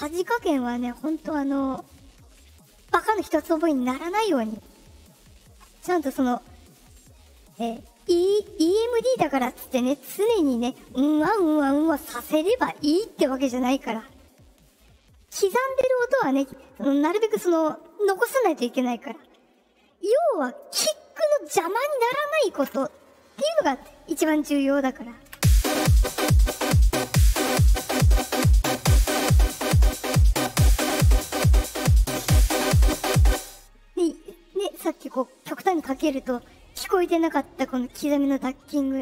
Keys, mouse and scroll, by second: 0.4 click, 2.5 click, 3.8 click, 25.3 space, 27.6-28.7 drag, 29.1-33.1 drag, 33.3 space, 34.9-35.9 drag.